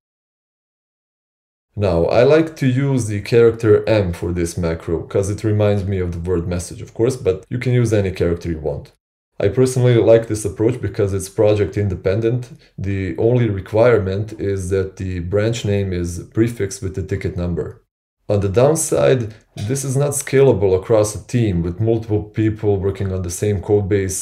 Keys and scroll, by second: 0.0-0.3 typing, 0.8 Return.